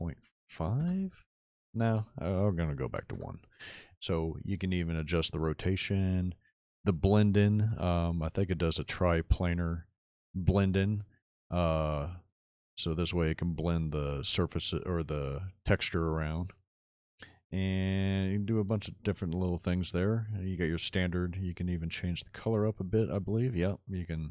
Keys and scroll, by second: 0.2 KP_5, 0.8 Return, 3.0 KP_1, 3.2 Return.